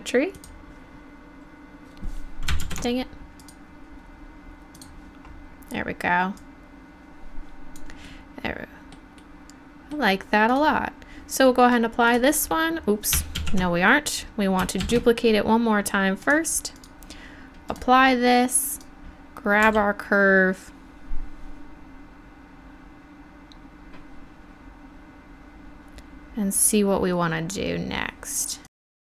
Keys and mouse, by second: 2.7 ctrl+z, 6.4-8.2 drag, 10.5-12.1 drag, 13.4 ctrl+z, 14.9 shift+d, 19.7 g, 20.7-23.0 middle drag, 28.8 KP_7, 28.9 r.